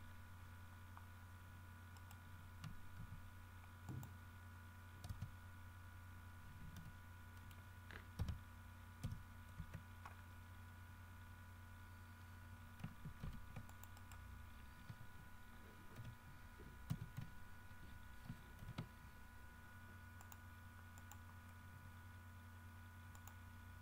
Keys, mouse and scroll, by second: 0.0 KP_Enter, 1.3-1.6 scroll up 2, 2.1 right click, 3.1 z, 4.0 click, 5.2 Tab, 6.9 g, 7.5 click, 8.4 KP_Subtract, 9.2 KP_1, 9.7 KP_Enter, 13.4 ctrl+r, 13.8 ctrl+click, 14.1 ctrl+middle click, 15.0 h, 16.1 l, 17.0 x, 17.3 v, 18.8 alt+h, 20.4 click, 21.1 click, 23.3 middle click.